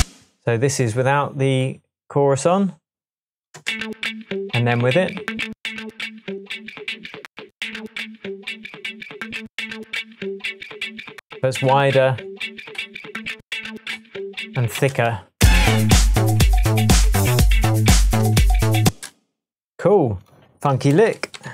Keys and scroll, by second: 3.5 space, 12.7 alt+m, 13.9 alt+m, 14.7 alt+space, 18.8 space, 20.6-21.5 typing.